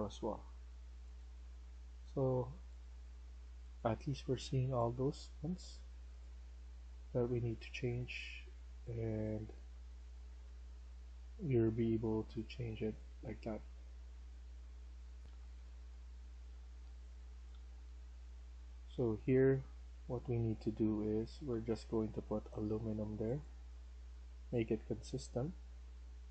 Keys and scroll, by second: 6.9-12.5 typing, 15.2 F1, 15.3-22.0 typing, 24.9 w.